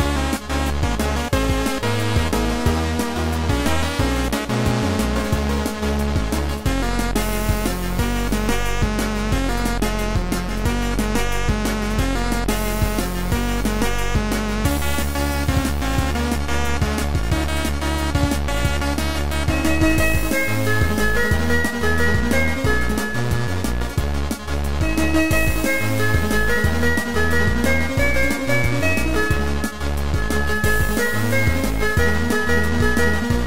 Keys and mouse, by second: 0.4 click, 4.2 click, 4.7 right click, 5.8 right click, 6.6 click, 12.3 click, 13.4 click, 14.4 click, 15.8 click, 16.4 click, 17.3 click, 19.0 click, 19.7 click, 20.8 click, 22.3 click, 24.3 click, 24.7 click, 25.2 click, 26.6 click, 27.4 ctrl+2, 29.2 click, 29.4 ctrl+z, 29.4 click, 30.4 click, 32.5 click.